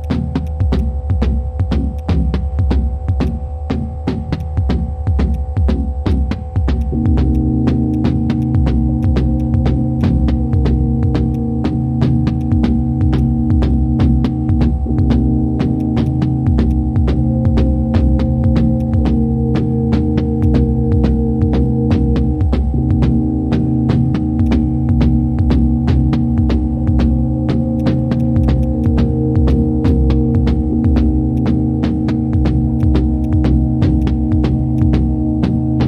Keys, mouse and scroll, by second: 3.2 ctrl+click, 14.2 shift+click, 16.0 shift+click, 20.4 ctrl+shift+click, 24.4 ctrl+shift+click, 28.2 shift+click, 29.5 shift+click, 33.2 shift+click.